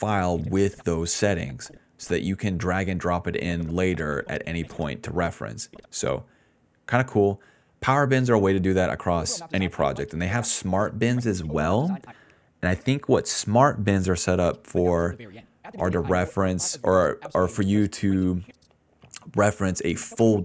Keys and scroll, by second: 6.7 i, 7.6 s, 7.7 s, 9.1 space, 9.8 d, 10.4 space, 10.7 space, 12.0 space, 14.2 space, 15.8 d, 17.0 s, 17.5 d, 18.2 space, 19.4 s.